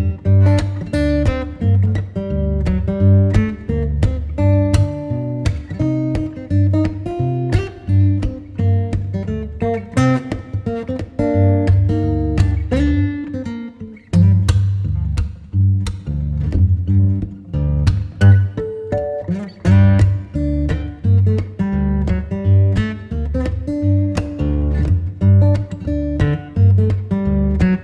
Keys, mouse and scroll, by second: 1.8 6, 2.3 Return, 5.1-5.8 typing, 10.3 2, 11.0 3, 12.8-13.9 typing, 18.4 0, 18.7 Return.